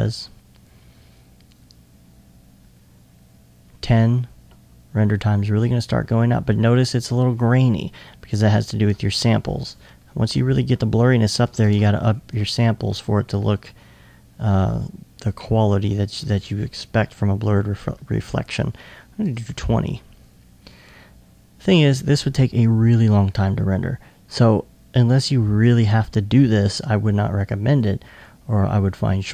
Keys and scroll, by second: 12.3 Tab, 19.3 Tab.